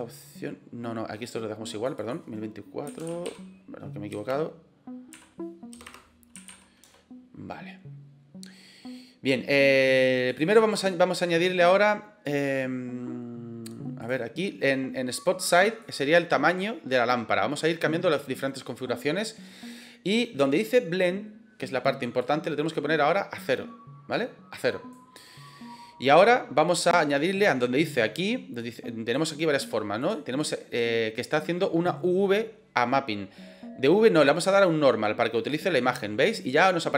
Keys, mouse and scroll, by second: 1.9-7.6 drag, 5.8 BackSpace, 10.3-14.0 drag, 15.7-19.7 drag, 22.1-24.9 drag, 28.6 click, 29.9 click, 30.3 click, 34.6-35.4 drag.